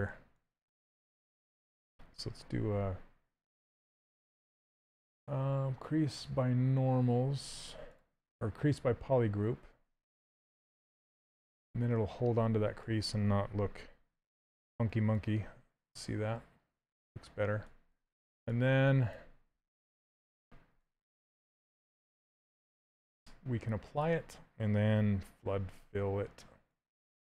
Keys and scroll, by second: 2.2 2, 10.7 d, 14.0 shift+f, 20.2 shift+f.